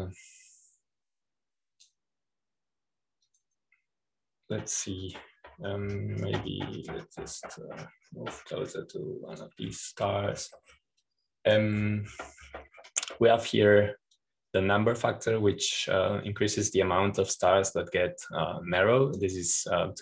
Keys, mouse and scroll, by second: 0.0-6.1 drag, 7.2-8.1 scroll up 2, 8.1-9.1 scroll up 1, 9.1-9.7 scroll up 1, 9.7-10.8 scroll up 1, 10.8-12.0 drag, 10.8-12.0 scroll up 1, 12.0-12.9 scroll down 2, 12.9-14.1 drag, 14.1-16.0 scroll down 2, 16.0-20.0 drag.